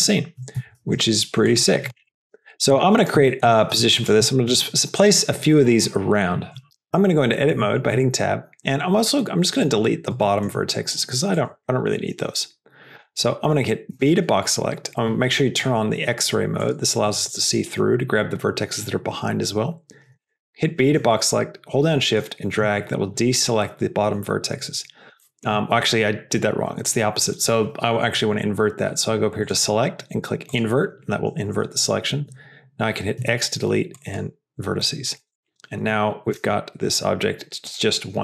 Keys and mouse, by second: 0.6 s, 1.8 g, 2.9 s, 3.8 g, 6.6 Tab, 7.4 Tab, 7.8 Tab, 9.1 middle click, 10.1 shift+click, 11.7 shift+click, 12.2 shift+click, 13.8 b, 16.5 click, 17.0 click, 25.1 shift+middle click, 29.3-30.5 drag, 34.7 click, 35.1 Tab, 36.4 KP_0, 37.6 click.